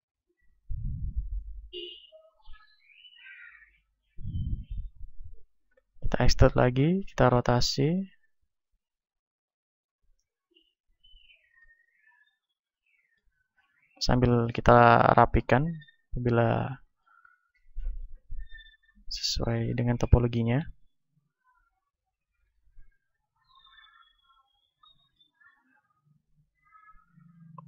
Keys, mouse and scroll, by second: 2.4-5.7 drag, 5.7 e, 6.5-9.7 drag, 7.1 r, 8.3 s, 9.9-11.8 drag, 11.5 right click, 11.8-13.5 middle drag, 13.5 ctrl+Tab, 14.5 middle click, 15.1 click, 15.1 right click, 16.1-18.5 drag, 16.1 right click, 18.8 right click, 19.8 click, 19.8 right click, 20.5-21.9 right drag, 21.3-23.9 drag, 23.9-25.3 middle drag, 25.3 ctrl+Tab, 27.2 KP_1.